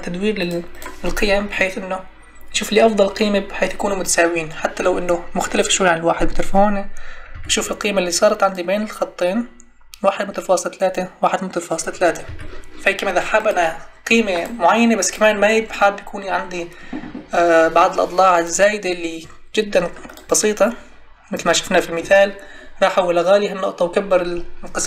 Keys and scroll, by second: 7.3 m, 12.2 m.